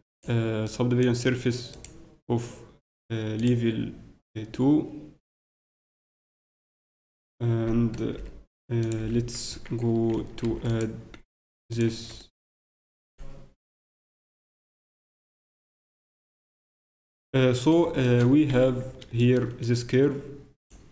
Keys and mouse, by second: 8.9-10.8 drag, 8.9 t, 9.5 Tab, 11.9 Tab, 18.2 Tab, 18.8 z, 19.2-20.9 drag.